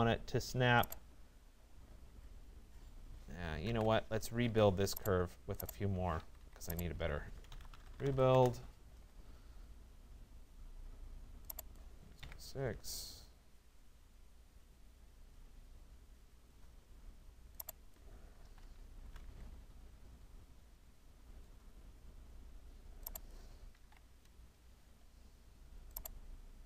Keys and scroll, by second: 4.5 Escape, 8.4 Return, 12.3 6, 17.9 1, 19.1 Tab, 23.4 2.